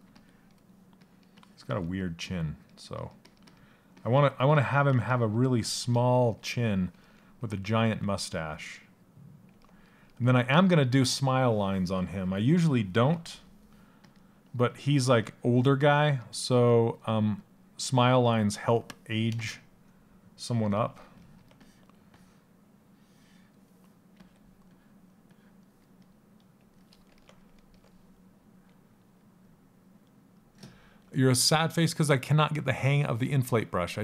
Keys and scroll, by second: 16.2 s.